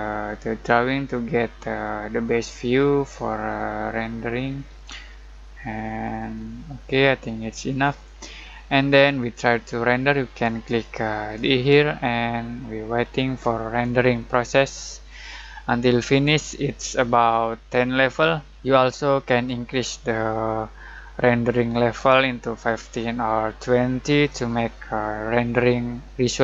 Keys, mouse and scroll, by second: 11.3 middle click, 11.6-14.9 drag.